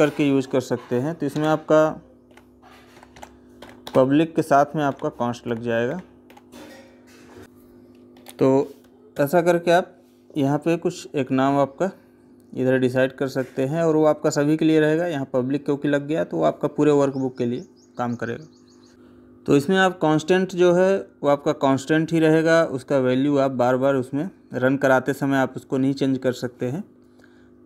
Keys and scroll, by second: 3.7 space.